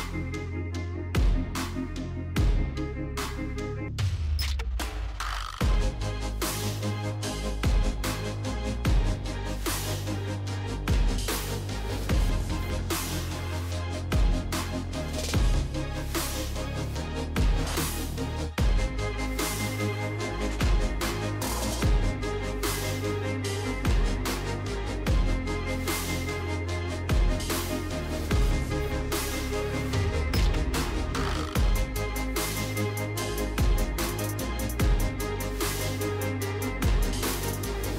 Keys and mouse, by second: 1.8 KP_Decimal, 2.8 click, 3.4-5.3 middle drag, 6.0 click, 6.5-8.3 middle drag, 10.3 middle click, 11.5 Tab, 13.8 click, 15.3 KP_Decimal, 16.5 middle click, 17.7 click, 19.3 shift+click, 23.2 click, 24.0 shift+click, 24.7 shift+click, 25.9 m, 28.2 click, 28.7 shift+click, 29.4 shift+click, 29.8 m, 30.7 middle click, 32.8 shift+click, 33.9 m, 35.3 Tab, 35.9 middle click, 36.7 Tab, 37.0 middle click.